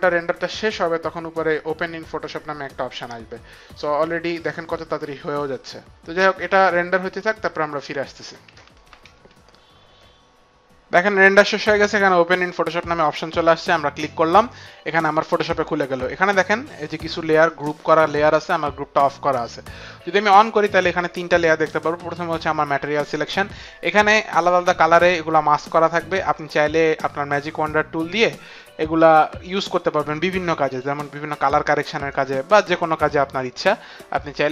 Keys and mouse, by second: 13.3 click, 17.0 click, 17.6 click, 19.7 click, 20.8 click, 27.8 click, 29.6 click, 31.5 click, 32.7 click.